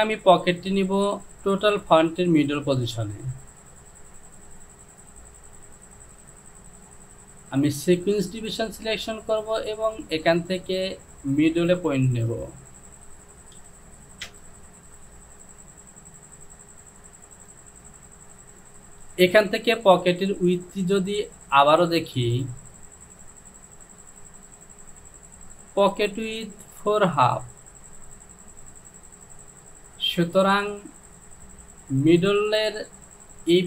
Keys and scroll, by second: 13.8 KP_2, 14.3 Return.